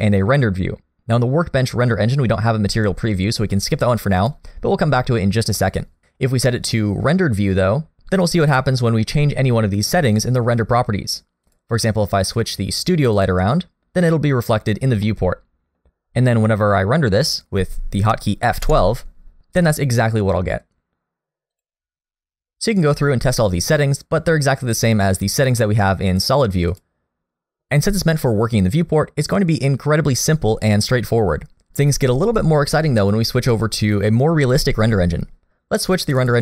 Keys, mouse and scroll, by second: 4.2 click, 11.4 click, 15.1 middle click, 18.9 F12, 23.6-25.1 scroll down 4, 25.1-26.1 scroll up 1, 26.1 click, 26.1 scroll up 1, 26.7 click, 36.2 click.